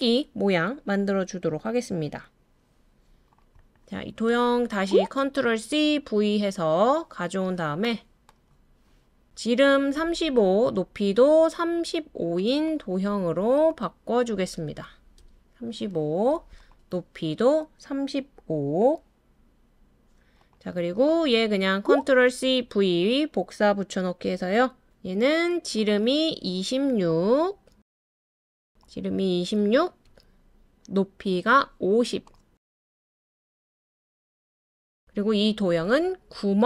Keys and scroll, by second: 5.4 super+c, 5.9 super+v, 14.3 typing, 15.2 Return, 21.8 typing, 22.3 super+c, 22.6 super+v, 27.1-27.7 typing, 29.4-29.8 typing, 32.7-33.1 typing, 34.7 typing.